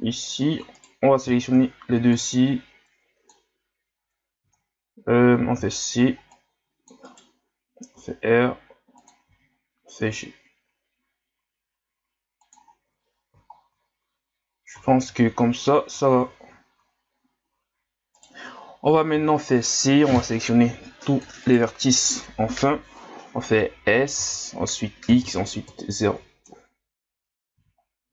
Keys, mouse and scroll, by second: 0.7 right click, 1.4-1.8 shift+scroll up 1, 1.8 b, 7.9 r, 9.3 g, 12.7-13.5 scroll down 3, 13.5-14.1 shift+scroll down 4, 14.1-14.9 scroll up 1, 14.9 shift+scroll up 1, 18.1 right click, 19.1 c.